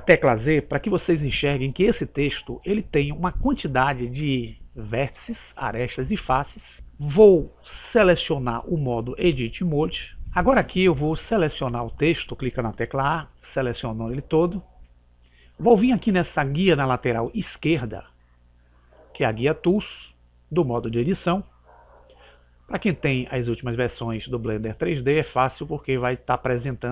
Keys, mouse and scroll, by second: 1.1 z, 9.6 click, 13.0 a, 18.2 click.